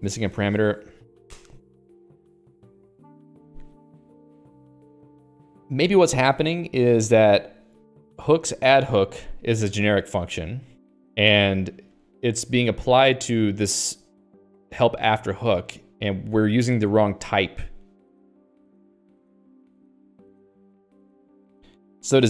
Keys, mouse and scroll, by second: 10.5 click, 16.1 click, 16.4 click, 18.7 click, 19.3 click.